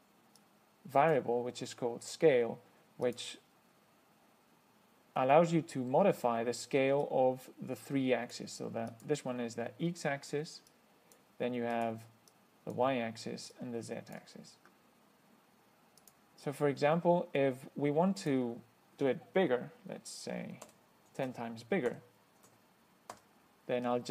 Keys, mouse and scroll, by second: 0.7 click, 3.3 click, 7.3-8.8 drag, 9.2 click, 11.0 click, 12.0 click, 12.6 click, 13.8 click, 16.3 click, 18.5 click, 20.4 Right, 20.9 0, 21.4 Right, 22.6 Right, 23.4 0.